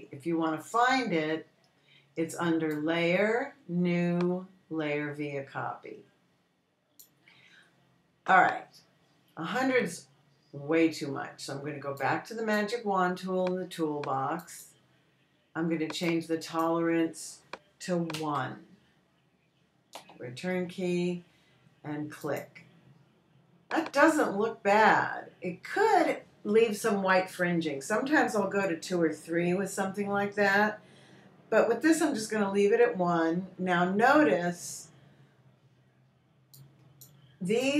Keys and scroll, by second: 19.6 i, 21.4 Return.